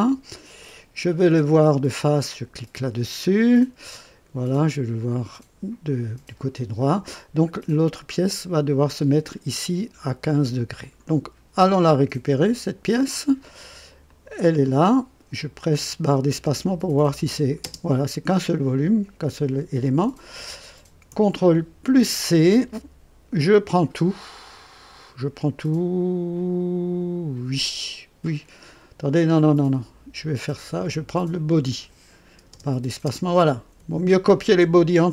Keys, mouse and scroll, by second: 2.3 click, 5.1 click, 12.5 click, 14.0 click, 16.3 space, 21.8 ctrl+c, 30.2 click, 31.4 click, 32.5 space, 33.0 space.